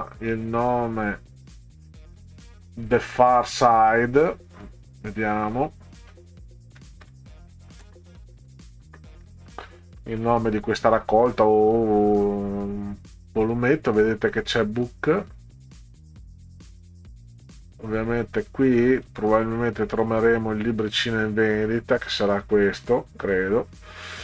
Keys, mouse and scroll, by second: 0.5-1.9 drag, 4.7 click, 6.6-10.7 typing, 14.4 click, 18.4 right click, 19.1 click, 20.0 click.